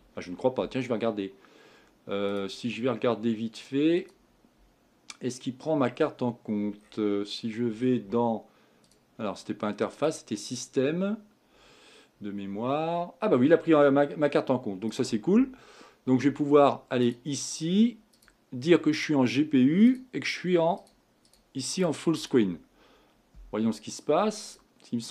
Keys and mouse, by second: 0.0 Escape, 3.2-5.2 drag, 19.8-25.1 drag.